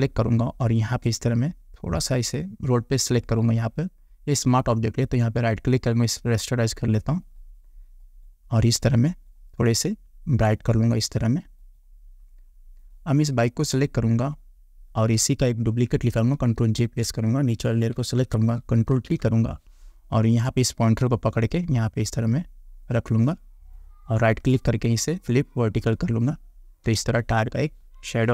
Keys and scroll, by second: 16.8 ctrl+j, 19.0 ctrl+t, 27.0 Return.